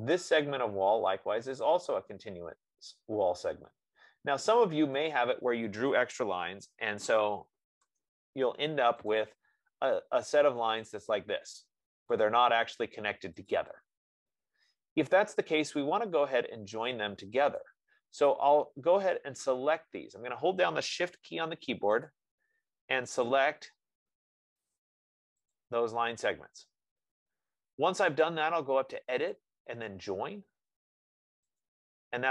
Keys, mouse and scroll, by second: 0.5 click, 4.1 F15, 5.5 click, 6.7-8.2 typing, 9.5 click, 11.2 click, 16.8-17.3 scroll, 17.4-17.9 scroll, 17.9 click, 19.6 click, 22.4 click, 23.6 click, 25.0 click, 25.8 click.